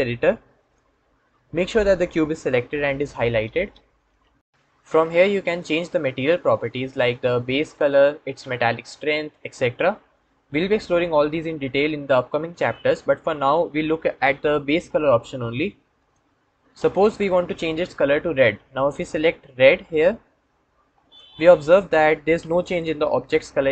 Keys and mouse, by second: 15.8 click.